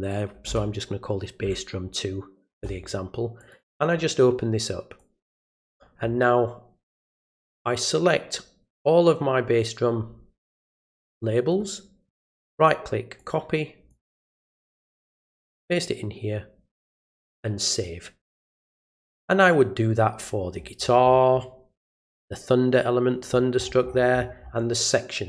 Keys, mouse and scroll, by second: 3.4 click, 3.6 click, 5.0 click, 7.3-11.5 drag, 12.0 right click, 13.2 click, 13.9 click, 14.6 right click, 15.5 click, 16.8 click, 17.7 click, 18.9 click, 20.2-22.2 scroll down 5, 22.2 click, 23.3-24.5 scroll up 6.